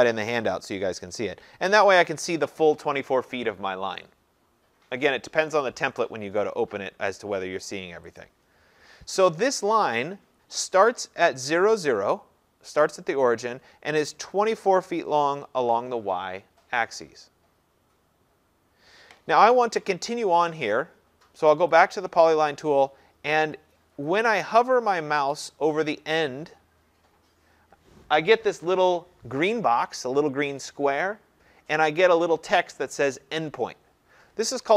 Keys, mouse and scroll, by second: 0.3 scroll, 1.0-3.6 scroll, 8.2 click, 21.8 click.